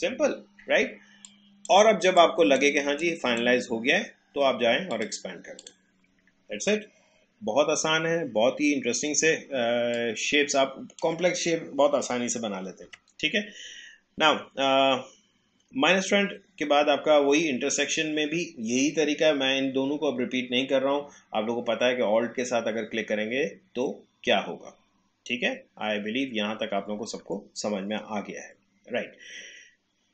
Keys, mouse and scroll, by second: 1.2-4.9 drag, 9.9-12.8 drag, 12.8 Delete.